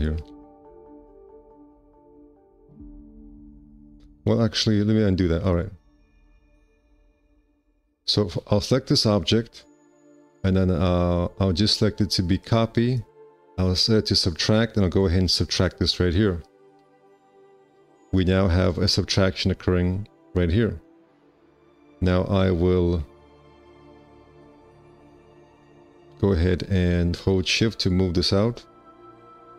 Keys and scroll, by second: 0.6 4, 0.9 q, 4.9 ctrl+z, 7.5 w, 24.5 ctrl+z, 29.3 q.